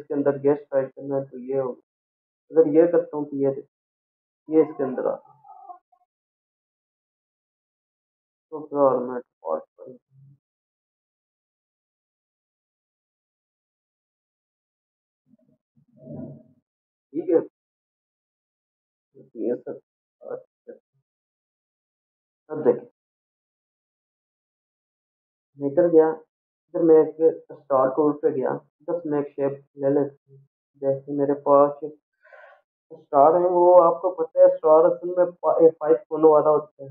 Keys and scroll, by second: 20.3 ctrl+0, 23.7 Delete.